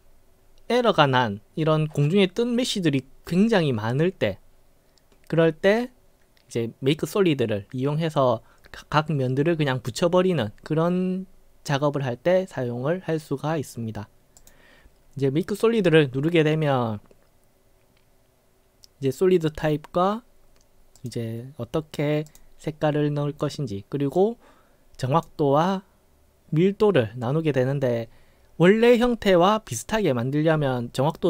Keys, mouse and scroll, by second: 14.4 click, 21.0 click, 22.3 click, 24.2-25.3 drag.